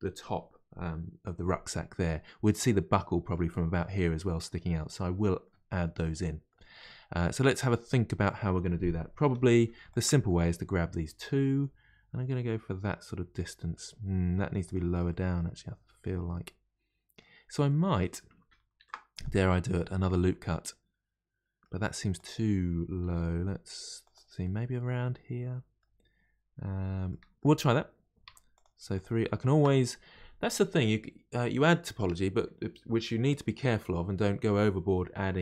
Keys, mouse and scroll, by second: 2.9-9.3 middle drag, 9.3 3, 9.4 click, 9.9 shift+click, 10.3-13.3 middle drag, 14.6 click, 15.1-18.8 middle drag, 18.8 ctrl+r, 19.7-22.1 middle drag, 22.1 click, 23.0 g, 24.4-28.3 middle drag, 28.3 3, 28.5 click, 28.9 shift+click, 29.4 shift+click.